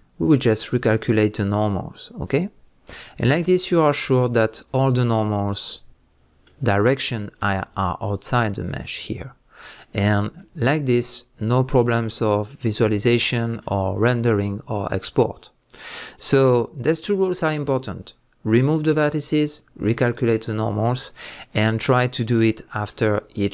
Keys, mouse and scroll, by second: 3.3-4.2 scroll down 2, 4.2 scroll up 1, 4.8 middle click, 11.7-13.4 middle drag.